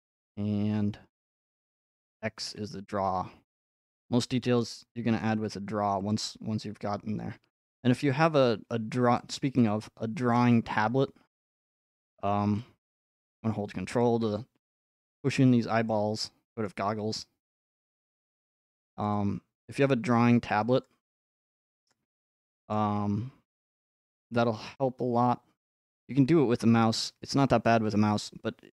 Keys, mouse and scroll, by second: 0.0 scroll, 2.5 x, 3.1 x, 3.9-4.9 scroll, 5.2 f, 6.1 click, 11.4-13.5 drag, 14.0-16.1 ctrl+drag, 16.6-18.9 middle drag, 18.9 scroll, 19.1 click, 22.1 scroll, 22.7-23.2 scroll, 23.3 scroll, 24.2 click, 26.2 click.